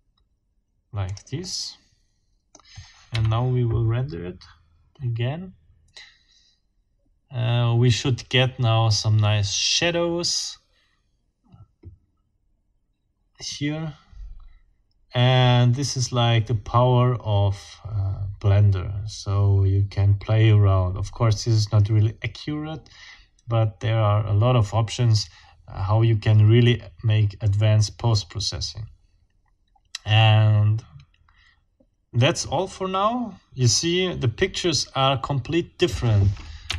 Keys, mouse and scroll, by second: 1.1 click, 1.4-2.7 drag, 3.1 F12, 36.7 ctrl+alt+Up.